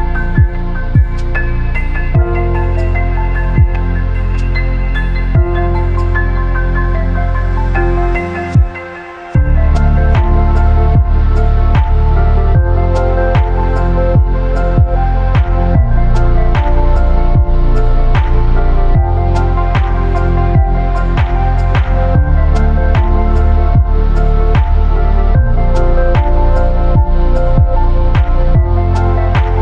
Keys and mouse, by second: 0.0-3.8 typing, 0.0 ctrl+click, 0.7 click, 1.4 click, 2.2 click, 2.9 click, 3.6 click, 4.5 middle click, 5.0 shift+middle click, 5.8 click, 5.9-10.4 typing, 6.5 click, 7.3 click, 8.0 click, 8.8 click, 9.5 click, 10.3 click, 11.4-13.6 middle drag, 14.1 ctrl+click, 14.2 g, 15.0-17.3 middle drag, 18.3-19.3 middle drag, 19.4 a, 19.8 a, 20.0 q, 20.5 a, 21.0-23.0 middle drag, 23.4 middle click, 25.2 shift+click, 25.7-26.9 drag, 27.4 a, 27.7 u, 28.4 a.